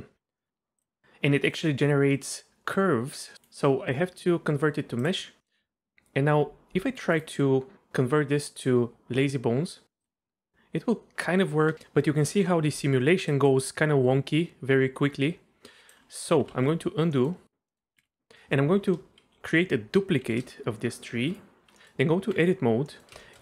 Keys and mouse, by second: 0.4 middle click, 1.6-3.3 drag, 3.4-5.1 drag, 5.4 middle click, 7.2-10.3 right drag, 13.3-15.9 drag, 16.2 middle click, 16.6 ctrl+z, 17.1 middle click, 17.7 click, 18.0 ctrl+z, 20.2 shift+d, 21.8 click, 22.0 Tab, 22.9 middle click, 23.2 shift+middle click.